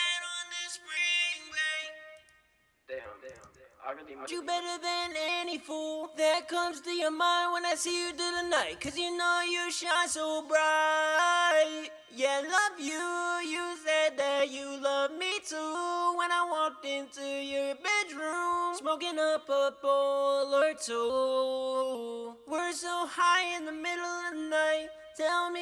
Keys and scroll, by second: 8.4-9.1 typing.